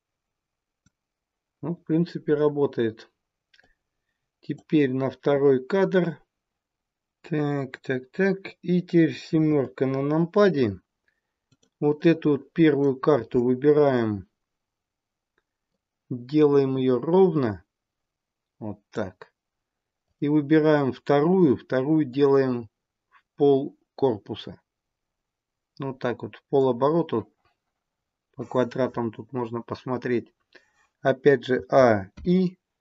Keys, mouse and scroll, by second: 3.6 click, 9.4 KP_7, 11.4 click, 11.9 click, 15.6 click, 20.0 click, 22.1 click, 31.6 a, 32.0 i.